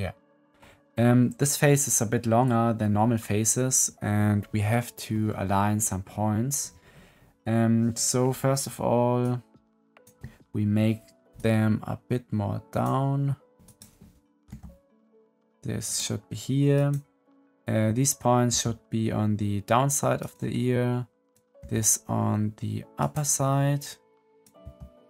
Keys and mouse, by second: 9.1 click, 9.4 click, 11.3 middle click, 11.5-12.7 drag, 13.6 click, 14.4 g, 16.7 click, 18.4 g, 21.1 click, 21.5 g, 24.5 g.